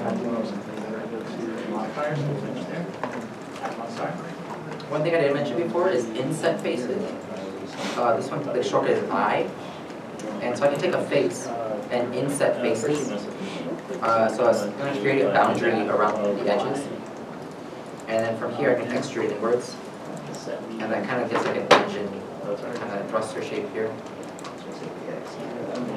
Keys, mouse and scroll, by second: 9.9 i, 19.2 i, 19.3 e, 20.4 middle click, 20.6 Tab, 21.6 middle click, 23.1 Tab, 23.7 middle click, 24.6 Tab, 25.2 middle click.